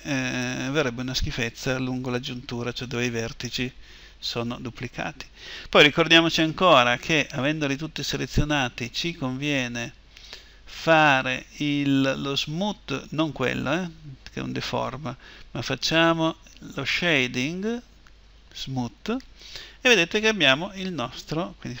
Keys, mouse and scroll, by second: 8.6-14.4 drag, 15.3-21.8 drag.